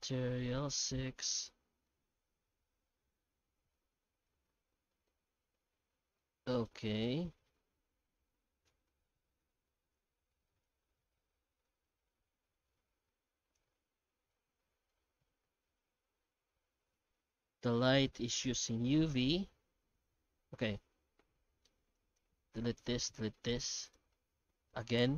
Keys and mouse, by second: 1.2-1.8 middle drag, 3.7-4.1 middle drag, 4.5 middle click, 5.6-6.2 middle drag, 6.4 shift+middle drag, 7.6-8.6 middle drag, 9.6 middle click, 10.5 middle click, 11.7-13.5 drag, 14.0-14.4 middle drag, 14.6-14.9 shift+drag, 15.9-17.1 middle drag, 17.9-20.6 middle drag, 21.3-21.9 middle drag, 21.9 right click, 22.8 right click, 23.3 middle click, 23.8 right click.